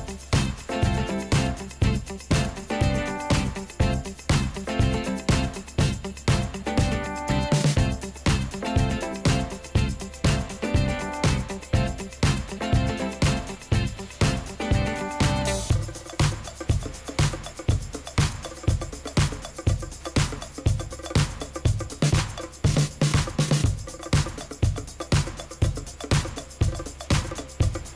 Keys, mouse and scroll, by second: 22.9 scroll down 1, 25.4 Return, 26.8 1, 27.8 Return, 27.9 0.